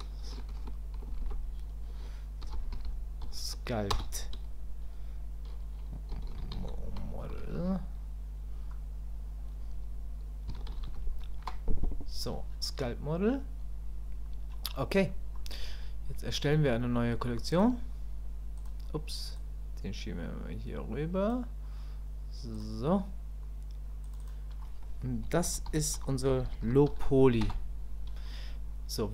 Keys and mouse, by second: 19.4-21.3 drag, 22.5 click, 24.0 click, 24.2-28.4 drag.